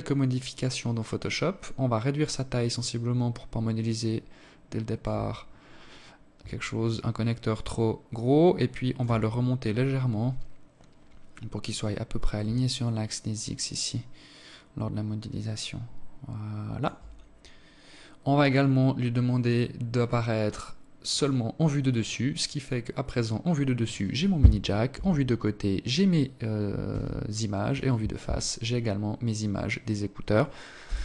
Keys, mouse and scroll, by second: 6.1 shift+click, 8.4-9.3 scroll up 5, 11.9 shift+click, 17.4 click, 18.3 click, 20.9 click, 21.6 scroll down 3, 23.7 KP_3, 25.7 KP_1, 29.6 KP_7.